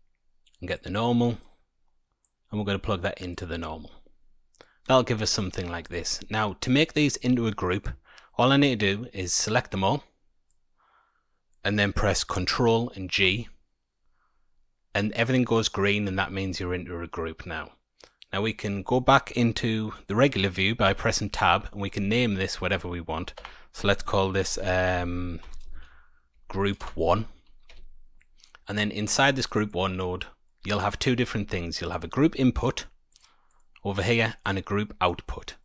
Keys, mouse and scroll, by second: 0.7 click, 2.2 click, 5.8 click, 9.3 click, 13.1 ctrl+g, 20.8 Tab, 21.4-23.8 scroll up 11, 22.3 click, 27.7 Tab, 28.3-29.2 scroll down 7, 29.2 scroll down 2, 29.3 middle click, 30.0-30.4 scroll up 1, 30.4 middle click, 31.9 click, 33.4 click, 34.4 click.